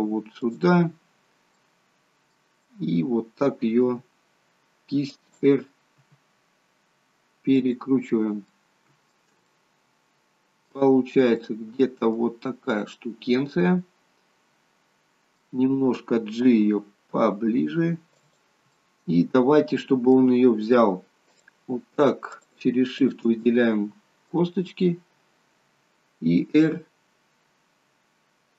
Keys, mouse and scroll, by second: 0.9-1.3 scroll up 3, 1.6 middle click, 2.6 scroll down 1, 4.0 r, 6.0 r, 8.2 scroll up 2, 8.5 middle click, 9.5 shift+middle click, 11.2 scroll up 2, 11.5 middle click, 12.4-12.8 scroll down 2, 12.8 middle click, 16.4 g, 18.8 middle click, 21.4 click, 22.4 shift+click, 23.0 shift+click, 23.4 middle click, 24.5 scroll down 1, 26.3 r.